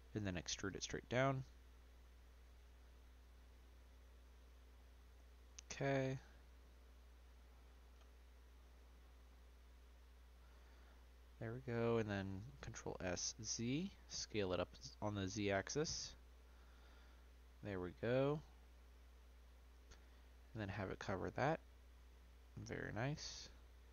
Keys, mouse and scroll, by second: 0.1 e, 4.7-6.3 middle drag, 6.3 Tab, 7.2 click, 8.3-10.0 middle drag, 10.0-10.4 scroll down 1, 10.4-11.1 scroll up 1, 11.1 click, 12.2 s, 14.5-14.9 middle drag, 14.9-15.5 scroll up 1, 15.5 click, 16.9 middle click, 17.3 scroll down 1, 17.6-18.6 middle drag, 18.6 click, 22.1-23.9 middle drag.